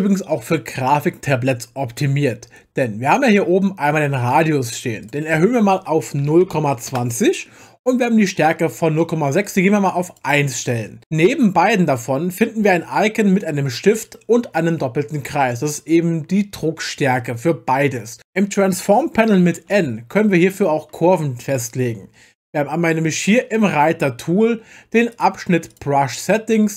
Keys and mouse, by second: 5.0-7.0 drag, 9.4 click, 25.1 click, 25.7 click.